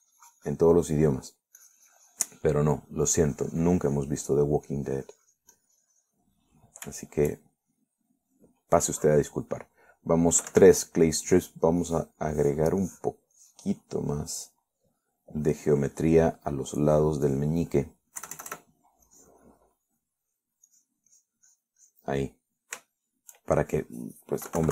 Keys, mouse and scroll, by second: 0.0 middle click, 0.7-2.0 drag, 2.0 middle click, 2.8-4.2 drag, 4.3-5.8 drag, 5.9-7.6 drag, 7.7 middle click, 8.2-9.8 shift+middle drag, 11.7 3, 12.4 click, 13.1 click, 13.6 click, 14.1 click, 14.6 click, 15.2 middle click, 16.1 middle click, 17.2 middle click, 18.0 click, 19.4 KP_Add, 20.3 click, 21.1 middle click, 21.6-21.9 scroll up 1, 21.9 click, 22.4 click, 23.4 middle click, 24.1 shift+middle click.